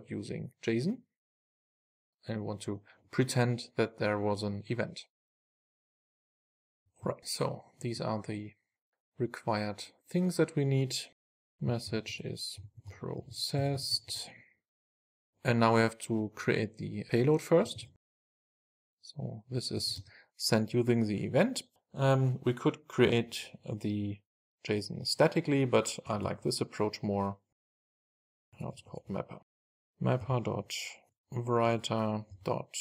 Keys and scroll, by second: 2.0 Return, 5.9 Return, 6.0 Return, 6.4 super+s, 29.8 Return, 30.8 Return, 31.7 Return.